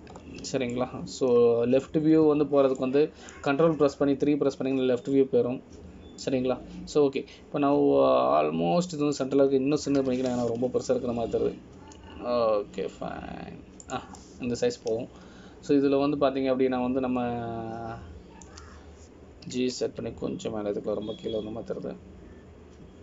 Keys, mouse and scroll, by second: 0.7 KP_3, 1.2 ctrl+KP_3, 2.3 scroll up 2, 2.9 shift+middle click, 4.0 scroll up 1, 5.0 shift+middle click, 8.4 middle click, 16.4 middle click.